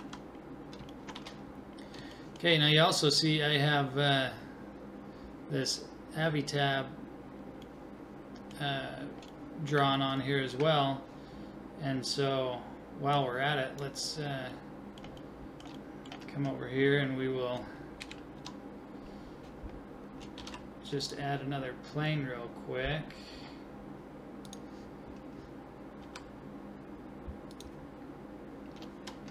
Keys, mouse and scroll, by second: 0.0 a, 6.7 middle click, 13.1-14.5 drag, 18.0 KP_1, 18.4 KP_5, 20.4 shift+a, 21.3 middle click, 23.1 middle click, 26.0 s.